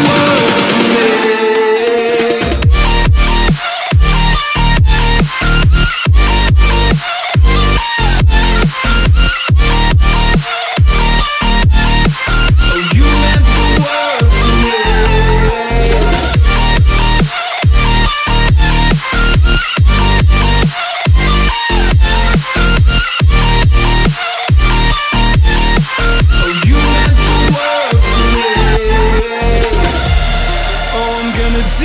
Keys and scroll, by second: 4.6 a, 5.3 space, 5.9 alt+super+space, 6.0 alt+super+space, 6.1 alt+super+space, 6.2 alt+super+space, 6.6 alt+super+space, 7.3 `, 9.7 typing, 14.7 space, 15.2 alt+super+space, 15.3 alt+super+space, 15.3 alt+super+space, 15.4 alt+super+space, 15.5-15.9 alt+super+space, 16.0 alt+super+space, 16.4 alt+super+space, 18.7 space, 19.0 space, 19.5 space, 19.6 space, 21.4 a, 28.8 v.